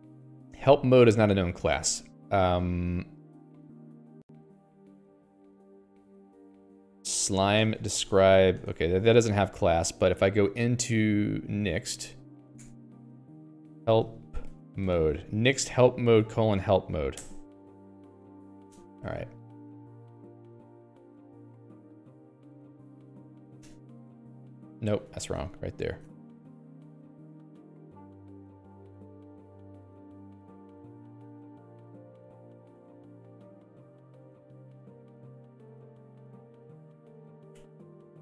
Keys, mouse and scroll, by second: 1.9 0, 2.1 Return, 2.6 Escape, 3.9 1, 4.0 Return, 4.3 Escape, 4.8 alt+x, 5.7 ctrl+j, 6.8-9.3 typing, 19.4 ctrl+g, 19.8 Escape, 19.9 Escape, 20.1-33.1 typing, 25.5 Escape, 35.1 x, 35.5 h, 37.0-38.2 typing.